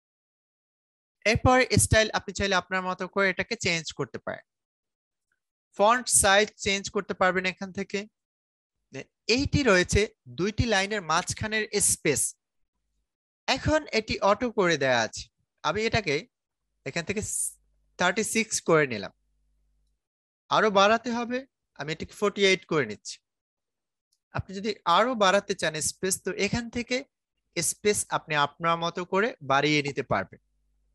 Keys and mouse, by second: 0.0-15.1 drag, 20.8 click, 24.7-30.9 drag.